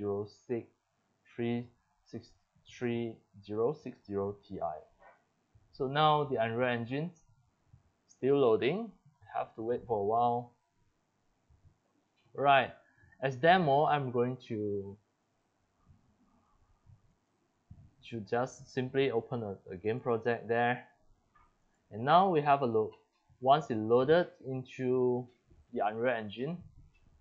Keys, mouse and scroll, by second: 5.2 click, 8.3 drag, 13.9 click, 15.2-16.4 drag, 17.1 click, 17.4 click, 19.9 click, 20.5 click, 20.7 click, 20.9 click, 21.1 click, 21.3 click, 24.6-26.1 drag.